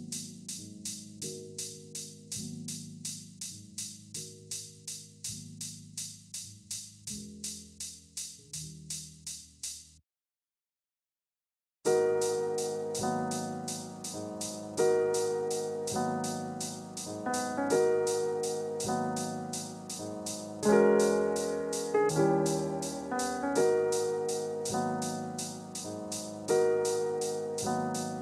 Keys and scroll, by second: 10.1 ctrl+g.